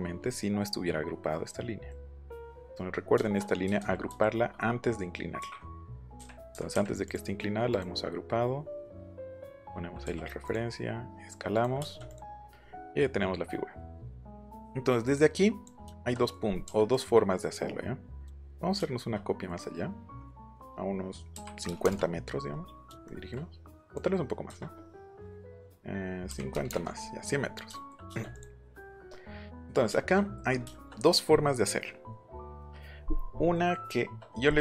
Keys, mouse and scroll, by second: 1.3 middle click, 2.2 middle click, 3.8 ctrl+z, 4.1 ctrl+z, 5.4 q, 6.1 Left, 6.5 Right, 6.7 Left, 7.0 click, 7.7 click, 9.2 click, 10.0 s, 10.4 click, 11.5 click, 11.8 middle click, 11.8 space, 12.1 click, 12.3 middle click, 14.0 middle click, 15.1 click, 15.8 shift+middle click, 16.4 middle click, 16.9 click, 18.7 shift+middle click, 21.3 KP_5, 21.6 KP_0, 21.8 KP_Enter, 23.8 click, 26.2 KP_5, 26.5 KP_0, 26.7 KP_Enter, 28.1 space, 28.3 click, 29.9 shift+middle click.